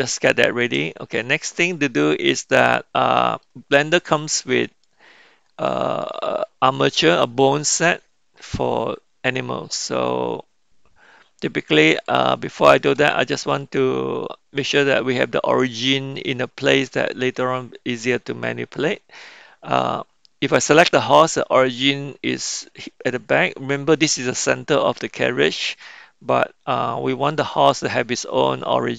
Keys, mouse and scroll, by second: 0.1-0.6 shift+middle drag, 0.8-1.8 middle drag, 2.3-3.4 middle drag, 4.8 middle click, 6.9 middle click, 11.9 click, 13.5-15.2 middle drag, 15.9-17.3 middle drag.